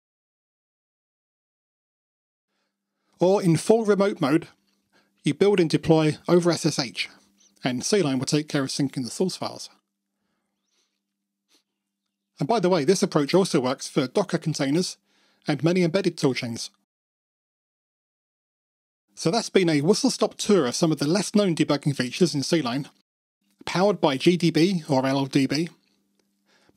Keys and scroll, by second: 1.3 alt+super+r, 9.7 super+c, 11.9 super+F2, 13.4 ctrl+d.